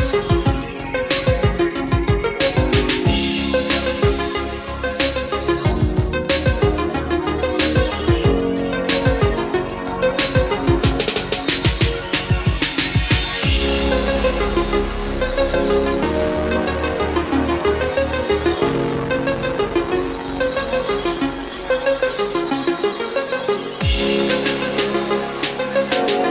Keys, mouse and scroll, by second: 4.2-6.1 drag, 10.1-26.3 drag.